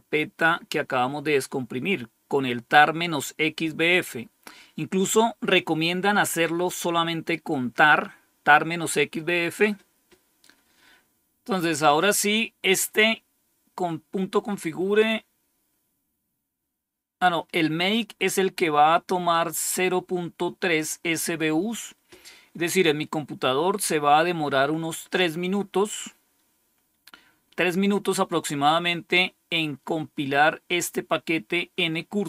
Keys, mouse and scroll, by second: 19.2-20.8 drag.